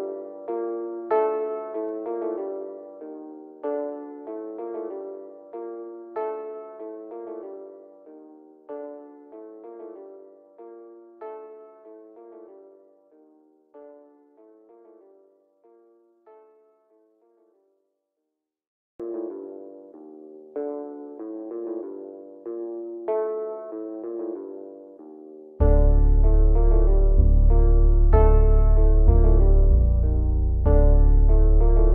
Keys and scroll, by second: 0.0-2.1 typing, 13.3 Escape, 14.0 ctrl+z, 28.2-31.2 typing.